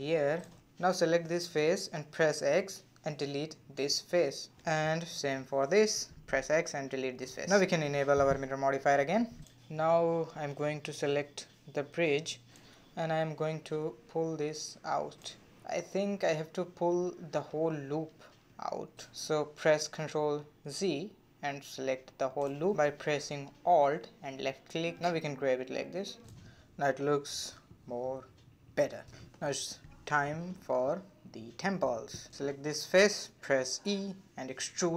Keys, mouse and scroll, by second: 0.0 middle click, 0.9 3, 1.6 click, 2.9 x, 5.0 click, 5.4 x, 8.1 click, 8.2-9.4 middle drag, 10.2 scroll up 1, 10.4 middle click, 11.2 2, 11.7 click, 12.3 click, 13.7 g, 16.3-19.3 middle drag, 19.5 ctrl+z, 19.8-21.3 middle drag, 21.3 shift+click, 21.7 middle click, 22.4 scroll up 1, 22.5-23.6 middle drag, 23.6 alt+click, 24.4 g, 25.3-28.3 middle drag, 28.4 scroll down 1, 28.5-29.7 middle drag, 29.7 scroll down 1, 29.8-31.7 middle drag, 31.7 3, 32.3 click, 32.7-33.9 middle drag, 33.9-34.6 scroll down 1, 34.6 e.